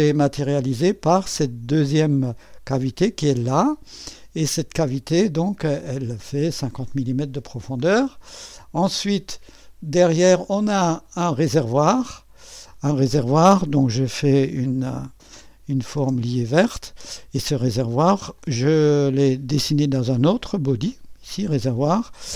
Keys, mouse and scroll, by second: 1.5 click, 3.7-6.9 drag, 8.3 click, 9.5 click, 9.5 right click, 9.8 middle click, 10.4 click, 10.4 right click, 11.1 click, 11.1 right click, 11.2 middle click, 11.5 click, 11.8-15.4 drag, 15.4 click, 16.0 space, 18.4-21.5 drag.